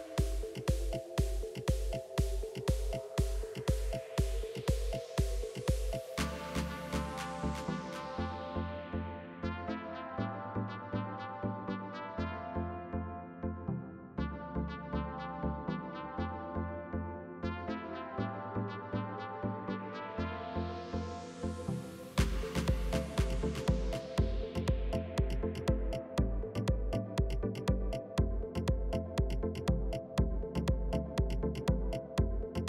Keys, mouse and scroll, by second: 1.7 click, 2.1 Tab, 2.4 click, 3.7 s, 5.4 g, 7.3 s, 9.8-10.1 scroll up 1, 10.1 shift+middle click, 10.9 click, 11.9 e, 13.3 click, 13.9 g, 18.9 click, 19.8 ctrl+r, 21.6 click, 22.0 s, 23.7 ctrl+r, 25.5 ctrl+r, 26.7 s, 29.8 click, 30.4 s, 32.4 ctrl+r.